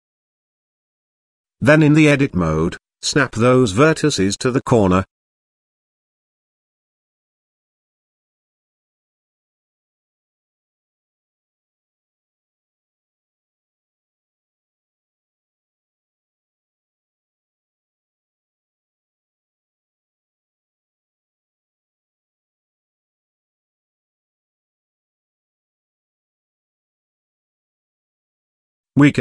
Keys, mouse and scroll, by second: 0.0-0.8 middle drag, 0.9-1.5 shift+middle drag, 2.2 Tab, 2.8 middle click, 5.7 z, 6.3 click, 7.6 g, 9.1 middle click, 9.7 z, 10.3 middle click, 10.9-11.5 shift+middle drag, 11.7 Tab, 12.4 shift+click, 13.0 middle click, 13.5-13.9 shift+middle drag, 14.5 g, 16.8-17.3 middle drag, 17.4-17.7 shift+middle drag, 17.9-18.8 middle drag, 19.3-20.2 shift+middle drag, 20.3-20.6 middle drag, 20.9 KP_0, 22.6 g, 25.5 g.